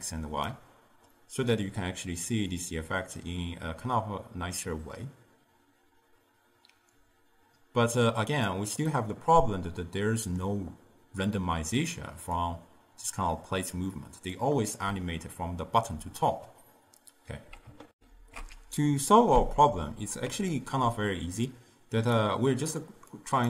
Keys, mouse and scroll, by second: 1.2-2.6 middle drag, 2.6-5.6 drag, 9.0-12.0 middle drag, 12.4-15.0 drag, 15.0-16.0 d, 19.3 ctrl+alt+shift+q, 19.9-21.5 middle drag, 21.5 click, 23.2 click.